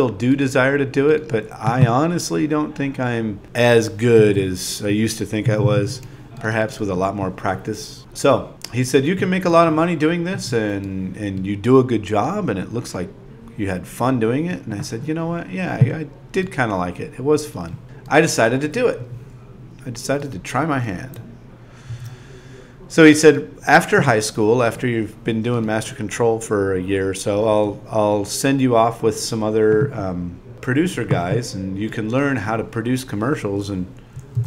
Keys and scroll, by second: 0.5 2, 1.8-3.6 typing, 3.4 super+a, 6.0 super+v, 7.5 shift+p, 8.0 0, 8.4 shift+v, 10.6 2, 12.8-14.7 typing, 17.7-19.0 typing, 20.7-23.4 typing, 25.4-27.6 typing, 28.1 alt+z, 32.4 ., 32.6 Tab, 33.1 ..